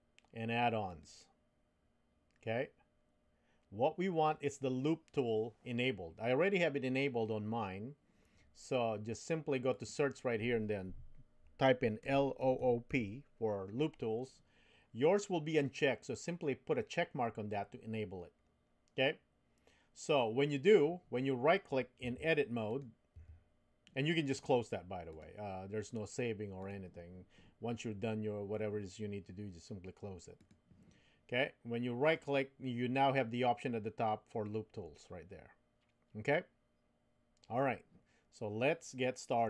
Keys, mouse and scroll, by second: 22.7 click, 23.2 Tab, 25.1-26.7 drag, 32.2-37.9 right drag.